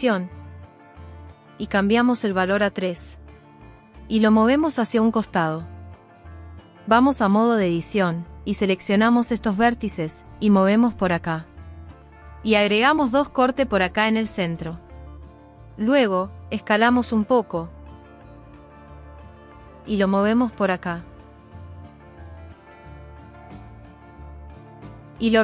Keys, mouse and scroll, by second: 2.7 click, 2.9 click, 4.8 g, 5.1 middle click, 5.7 click, 6.8 g, 7.1 middle click, 7.5 click, 7.7 ctrl+z, 8.5 g, 8.8-9.9 middle drag, 9.9 click, 10.7 g, 10.9 middle click, 11.7 click, 12.9 ctrl+r, 14.6 click, 16.7 s, 19.0 click, 19.3 s, 19.5 middle click, 20.1 click, 20.4 g, 22.4 g, 23.4 click, 24.4 s, 24.6 middle click, 25.1 click, 25.3 g.